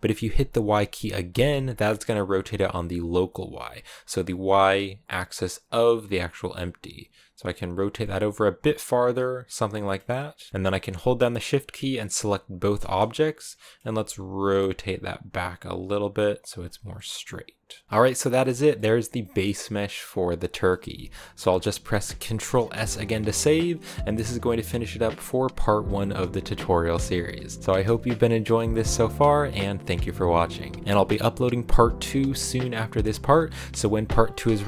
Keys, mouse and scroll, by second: 7.9-12.4 middle drag, 12.4 shift+right click, 12.6 scroll down 2, 12.8-13.8 middle drag, 13.8 r, 16.6 scroll down 1, 16.8-32.7 middle drag.